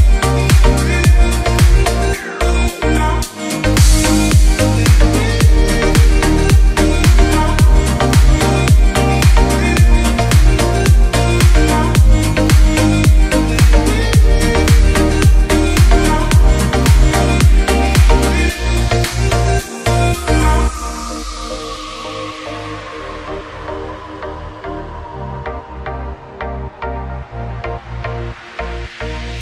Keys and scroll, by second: 2.6 shift+Page_Up, 11.2 shift+Page_Up, 11.6 shift+F2, 12.1 F3, 16.8 r, 17.2 F3, 20.1 F2, 21.5 shift+Page_Up.